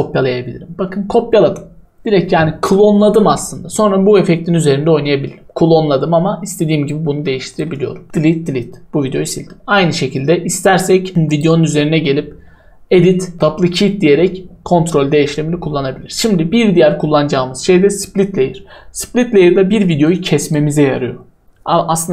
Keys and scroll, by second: 7.7 Delete, 8.0 Delete.